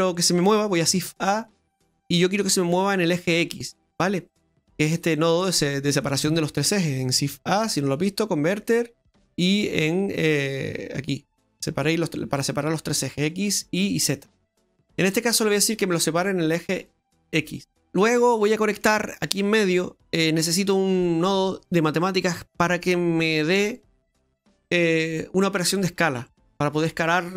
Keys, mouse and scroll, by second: 0.8 shift+a, 7.3 shift+a, 15.3 click, 16.7 middle click, 18.4 middle click.